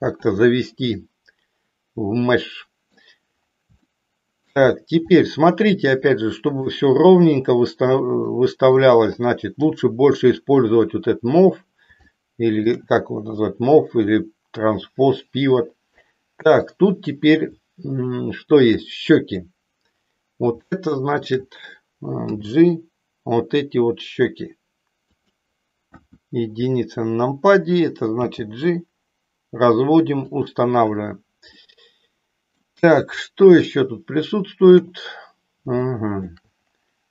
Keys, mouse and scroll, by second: 1.0-3.0 middle drag, 3.9 shift+middle click, 5.3-6.6 middle drag, 8.4 middle click, 9.5 KP_3, 12.2 shift+middle click, 18.6 click, 20.6 shift+middle click, 22.3 g, 25.8 KP_1, 28.3 g, 30.3 click, 31.6-32.6 middle drag, 33.6-34.8 shift+middle drag, 35.8 shift+middle click.